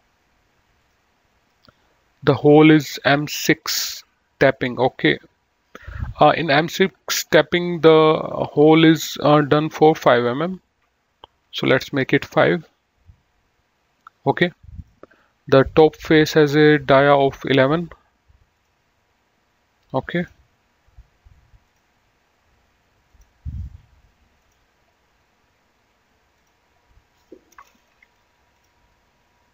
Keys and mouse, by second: 1.0 click, 6.9 click, 8.5 click, 11.6 KP_5, 12.0 Return, 14.9 click, 18.7 click, 20.3 click, 21.8 click, 23.3 click, 24.6 click, 26.6 click, 28.1 Delete, 28.8 click.